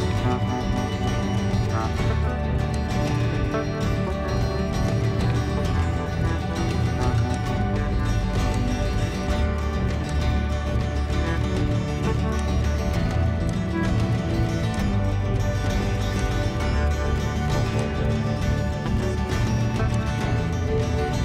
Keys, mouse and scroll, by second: 0.0 shift+a, 1.7 s, 3.2-4.5 middle drag, 4.5-6.2 scroll up 6, 6.2-6.8 scroll up 2, 6.8-7.2 scroll down 3, 7.5 click, 11.3-12.5 middle drag, 12.5 click, 14.9 ctrl+click, 16.3 ctrl+click, 17.9 click, 18.8-20.6 middle drag, 20.6 click.